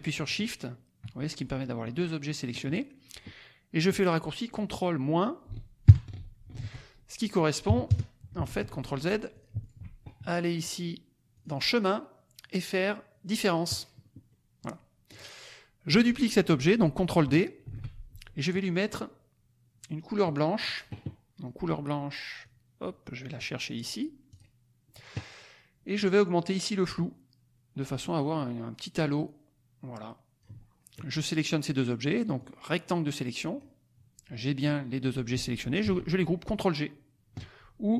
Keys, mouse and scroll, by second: 0.2 shift+click, 5.8 ctrl+KP_Subtract, 6.5 ctrl+z, 7.6 KP_Subtract, 7.8 KP_Add, 8.4 ctrl+z, 9.4 shift+click, 11.3 click, 13.8 click, 14.3 click, 15.1 click, 15.8 click, 17.6 ctrl+d, 20.0-20.8 drag, 22.4-23.5 drag, 24.3 click, 26.9-30.5 drag, 32.4-33.7 drag, 37.9 right click.